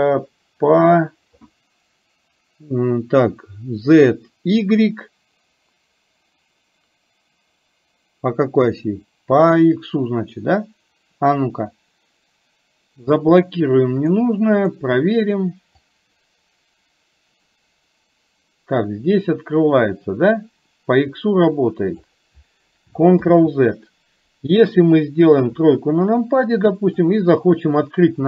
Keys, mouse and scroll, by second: 15.9-22.2 drag, 25.5 KP_3, 26.2 middle click.